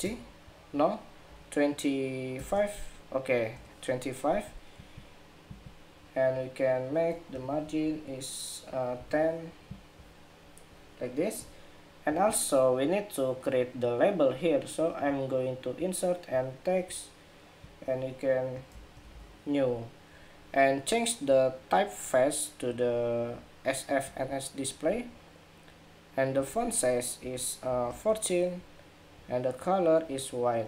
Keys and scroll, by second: 7.0 alt+Up, 8.4 alt+Up, 19.3 ⟲.